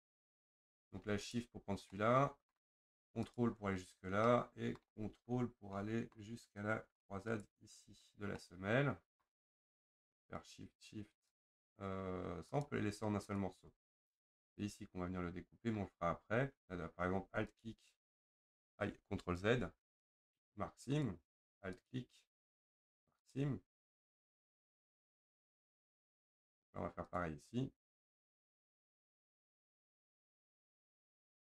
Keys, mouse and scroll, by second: 1.3 shift+click, 1.9-3.3 middle drag, 3.3 ctrl+click, 3.9-4.3 scroll up 1, 4.3 middle click, 5.1-5.8 scroll up 2, 5.8-7.4 middle drag, 7.4 ctrl+click, 8.0 scroll down 2, 8.4-10.4 middle drag, 10.4 shift+click, 11.4 shift+click, 12.6 shift+click, 13.4 shift+click, 14.1-14.5 scroll up 2, 14.5-15.9 middle drag, 15.9-16.4 scroll up 1, 16.4-17.0 scroll down 1, 17.6 alt+click, 19.5 ctrl+z, 21.0 right click, 21.9 alt+click, 23.3 right click, 23.6-24.0 scroll down 4, 24.0 middle click, 24.4-24.9 scroll up 1, 24.9 click, 25.5-27.2 middle drag, 27.2 click, 29.3 middle click, 29.9-30.3 scroll up 2, 30.3-31.4 shift+middle drag, 31.4-31.5 scroll up 2.